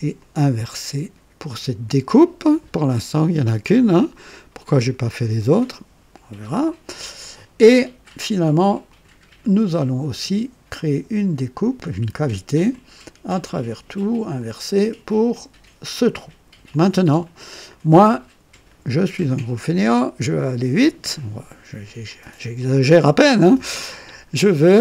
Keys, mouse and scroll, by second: 0.2 click, 1.4 click, 8.9 click, 10.7 click, 12.7 click, 13.4 click, 14.4 click, 15.8 click, 16.7 click, 17.7 click, 19.5-21.3 drag, 22.1-24.0 drag.